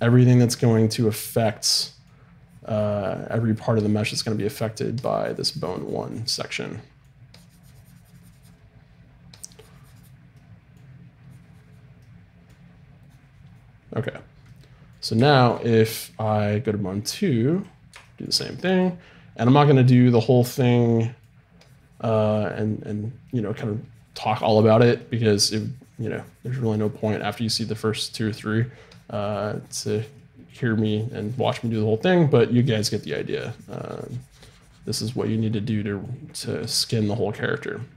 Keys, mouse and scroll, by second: 1.7-5.3 middle drag, 2.5-6.7 drag, 6.7 middle click, 7.3-9.0 drag, 9.3-16.4 drag, 17.5 right click, 18.0-20.1 drag, 21.6-23.4 drag, 24.7-27.4 drag, 24.7 right click, 28.2-32.0 middle drag, 28.9-32.4 drag, 32.1 middle click, 35.6-36.6 middle drag, 37.5-37.9 drag.